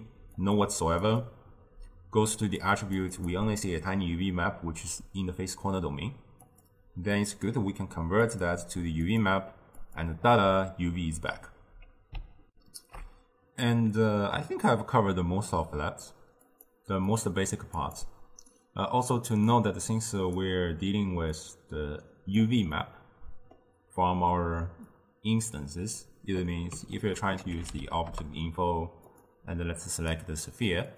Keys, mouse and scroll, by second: 1.1 click, 2.6-6.3 drag, 6.5-9.6 drag, 12.6 ctrl+alt+shift+q, 16.6 click, 17.2 click, 17.8 click, 19.6-22.8 drag, 22.8-25.0 middle drag, 25.0-27.0 drag, 27.0 ctrl+a, 30.0 click.